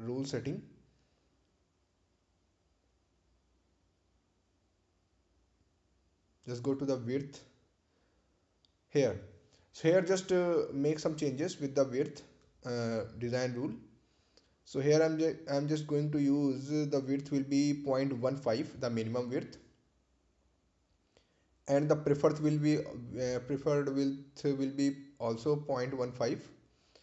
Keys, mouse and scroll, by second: 0.2 click, 3.4 click, 10.5 click, 10.6 click, 13.9 click, 20.0 BackSpace, 21.1-22.2 typing, 23.1 Return, 25.0 click.